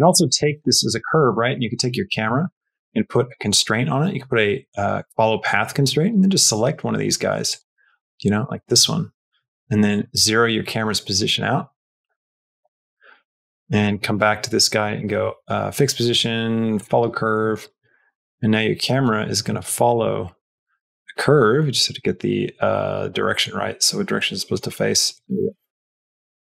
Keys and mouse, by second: 0.3 shift+middle click, 1.1 click, 1.5 click, 2.3 click, 3.1-5.3 drag, 7.4 click, 9.7 click, 11.2-12.8 drag, 13.4 click, 13.7 click, 14.7 click, 16.6 click, 17.7-18.9 drag, 19.9 KP_0, 23.1 middle click, 24.0 middle click, 25.0 middle click, 25.3 KP_0.